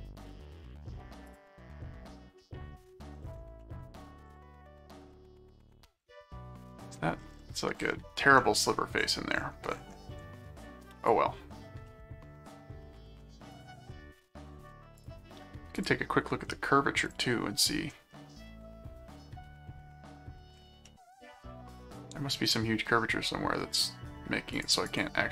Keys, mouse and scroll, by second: 1.3 click, 2.4 middle click, 3.6 middle click, 4.3-4.8 scroll up 4, 5.1 middle click, 9.1-9.7 scroll up 4, 10.4 scroll up 2, 11.0 click, 11.9 middle click, 13.5 click, 13.9 middle click, 15.0 click, 15.8 click, 17.1 click, 18.1 middle click, 20.8 middle click, 21.8-23.5 middle drag, 24.5 click.